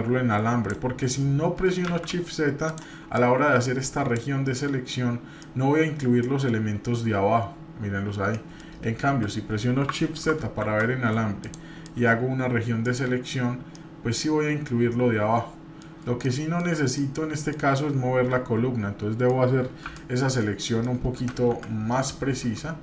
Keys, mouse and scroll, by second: 1.9 shift+z, 2.7 click, 3.2 click, 5.4 middle click, 6.4-7.4 scroll up 1, 8.3 middle click, 9.0 KP_7, 10.6 shift+z, 11.4 click, 11.8 click, 13.7-15.9 middle drag, 16.2 shift+middle click, 17.0 middle click, 17.7-19.3 middle drag, 19.8 t, 20.6 middle click, 21.2 Page_Down, 21.5 KP_7, 22.1 scroll up 3.